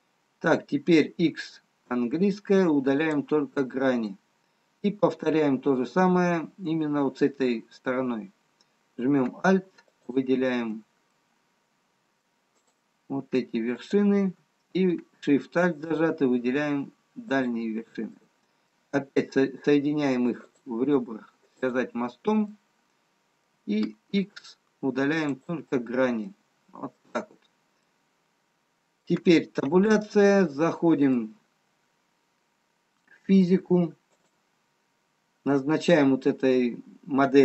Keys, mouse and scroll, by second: 0.4 middle click, 2.0 x, 7.2 scroll down 1, 10.4 alt+click, 11.0 middle click, 13.5 click, 15.2 alt+click, 17.8 alt+shift+click, 19.1 middle click, 20.4 click, 23.6 middle click, 25.1 x, 26.2 middle click, 27.6-29.1 scroll down 2, 29.1 middle click, 30.7 Tab, 30.7 middle click, 32.1-33.9 scroll down 1, 34.6 click, 36.4 click.